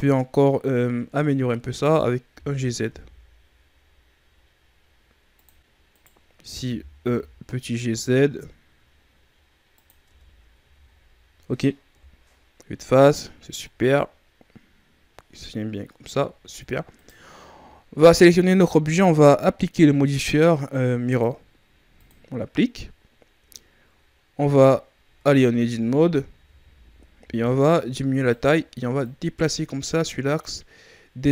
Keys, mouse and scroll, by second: 2.2 g, 5.9 right click, 6.5 g, 10.0 Tab, 10.5 a, 10.9-11.8 scroll down 1, 11.8 KP_1, 12.8-13.4 scroll down 2, 13.4-15.4 scroll up 5, 15.4-15.7 scroll up 1, 15.8-16.2 scroll down 2, 16.2-16.9 shift+scroll up 2, 16.9-19.9 right drag, 21.0 click, 24.9 Tab, 25.4 Tab, 25.8 Tab, 26.2 a, 26.5 a, 27.1 s, 28.9 click.